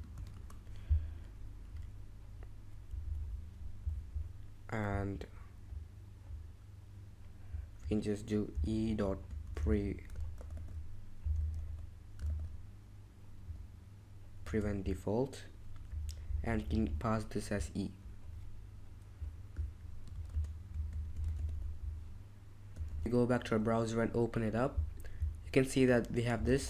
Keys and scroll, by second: 0.0-0.1 typing, 3.0 Escape, 5.6 Home, 5.9 Home, 6.1 Escape, 8.5-10.1 typing, 10.3 super+z, 10.5 super+z, 11.4-12.1 typing, 12.2 super+z, 14.4 typing, 15.8 typing, 16.5 Escape, 16.7 Escape, 20.1-21.8 typing, 26.2-26.6 typing.